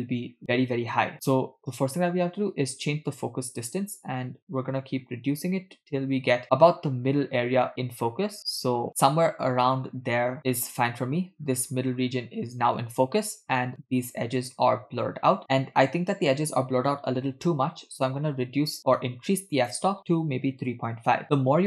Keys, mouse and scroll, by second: 1.6-11.0 drag, 11.5-11.9 scroll up 2, 13.4-13.9 scroll down 2, 19.5-21.2 drag.